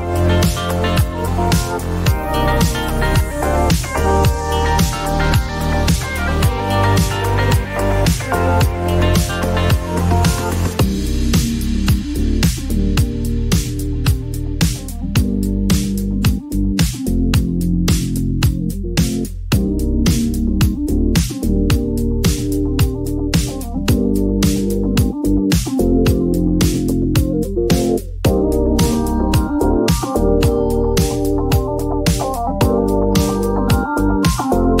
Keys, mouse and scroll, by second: 1.6 click, 1.8 typing, 3.2 typing, 4.0 click, 4.5 Return, 7.4 click, 8.5-9.5 typing, 10.0 Return, 13.1 click, 14.6 click, 14.6-15.2 typing, 15.4 Return, 19.8-24.0 drag, 20.5 typing, 21.2 Return, 24.2 click, 24.6-25.3 typing, 25.7 Return, 27.3-29.0 scroll, 29.2 click, 31.8 click, 32.7-33.6 typing, 34.0 click.